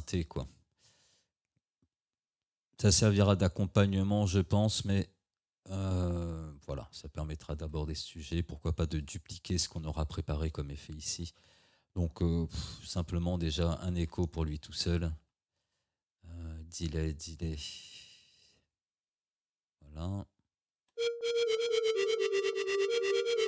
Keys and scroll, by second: 20.8 space.